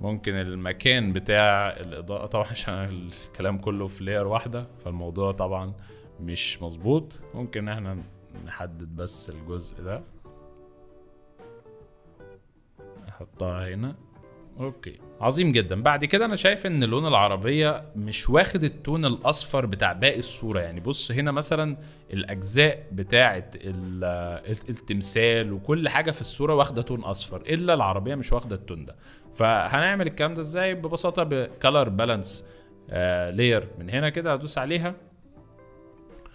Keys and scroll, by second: 0.0 v, 3.8 ctrl+z, 4.8 m, 7.0 v, 15.1 space, 16.0 z, 18.5 z, 19.8 space, 20.5 z, 24.4 space, 27.0 z, 33.2 F2.